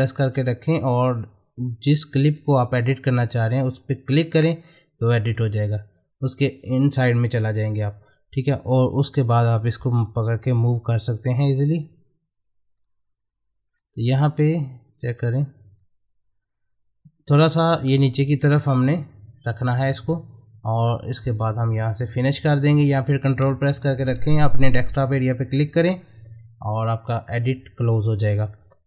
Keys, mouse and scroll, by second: 4.2 ctrl+click, 8.7-12.0 drag, 12.0-13.7 drag, 13.7-14.2 scroll up 1, 14.2-17.6 drag, 17.6 middle click, 18.5 scroll up 1, 20.9-25.7 middle drag, 25.7 ctrl+click, 28.3 middle click.